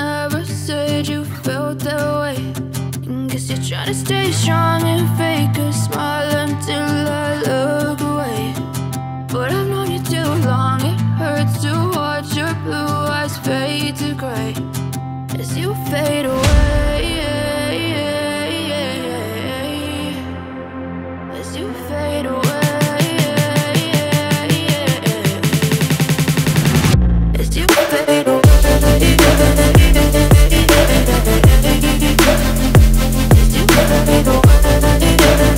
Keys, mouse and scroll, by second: 1.2-20.6 drag, 5.0 typing, 20.6-26.8 drag, 26.8-34.1 drag, 34.1-35.4 drag, 35.4 space.